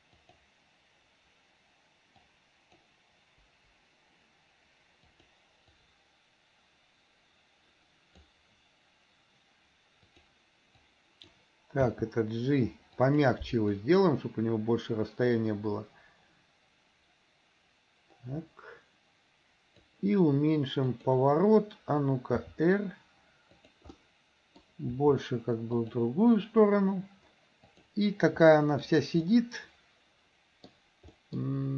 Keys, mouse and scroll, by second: 0.3 click, 2.2-2.8 drag, 3.5 Delete, 5.2 click, 5.8-8.3 drag, 10.2 drag, 10.8-11.3 drag, 12.0 g, 13.8-20.0 drag, 20.9 click, 22.5 r, 24.0 middle click, 25.0 r, 27.8 click, 28.5-28.8 middle drag, 29.3-30.8 middle drag, 31.2 middle drag.